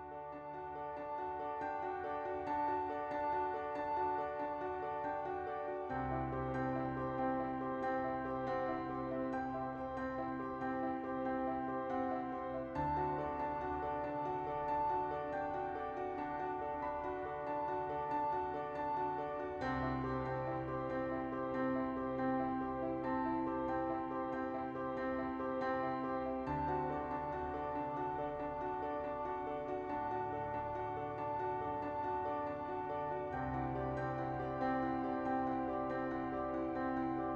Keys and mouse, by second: 1.8 click, 4.8 click, 5.7 click, 6.5 click, 10.2 click, 10.8 KP_0, 11.6 click, 11.8 click, 12.2 click, 13.2 click, 14.1-18.3 drag, 20.8 click, 25.2 right click, 29.8-32.9 drag, 33.2 middle click, 34.2 KP_1, 36.0 shift+middle click, 36.6 shift+a.